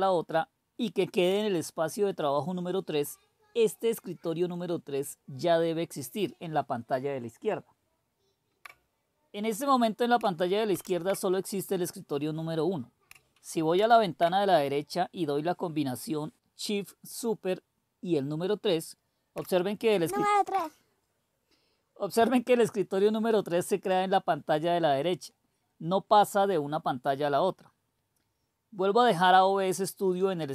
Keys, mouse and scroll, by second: 10.6 super+1, 13.7 super+2, 20.1 super+·.